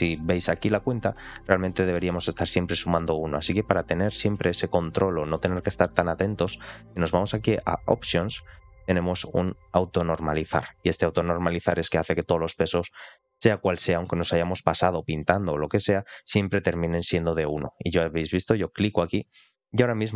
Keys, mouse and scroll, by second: 6.8-19.7 drag.